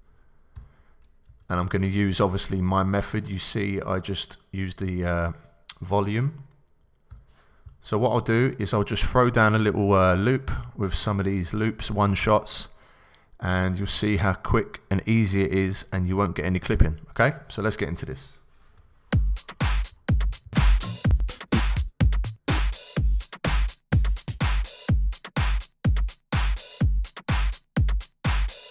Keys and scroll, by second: 0.5 d, 1.2 super+d, 1.4 super+Down, 7.1 c, 18.8 Return, 19.1 space, 21.0 Up, 23.8 Up, 24.4 Left, 25.3 Down, 27.0 Left.